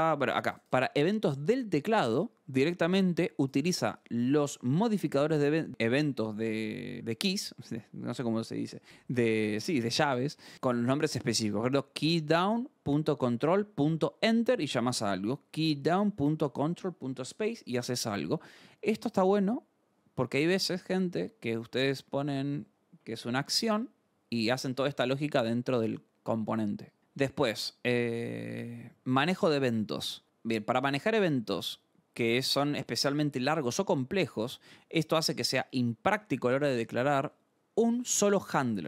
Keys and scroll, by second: 30.2-31.2 scroll, 31.4 scroll.